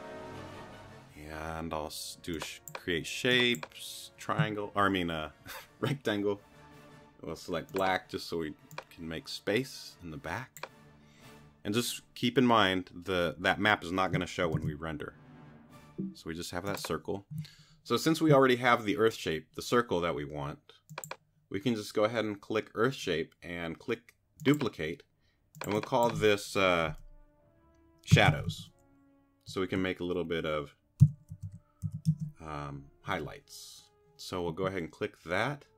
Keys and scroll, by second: 14.5 super+r, 27.9-29.0 typing, 30.8-32.4 typing.